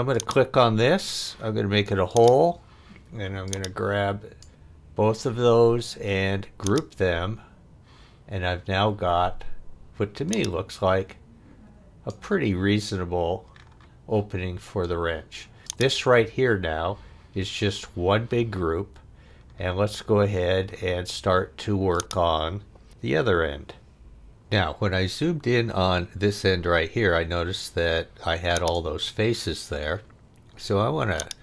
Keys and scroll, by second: 23.2 f.